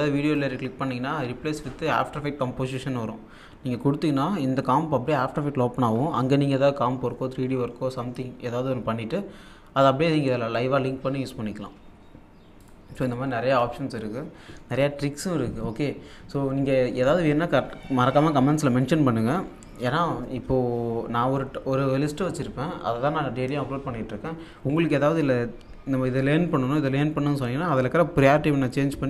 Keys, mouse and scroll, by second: 0.3 right click, 12.6 click, 14.7 alt+scroll down 1.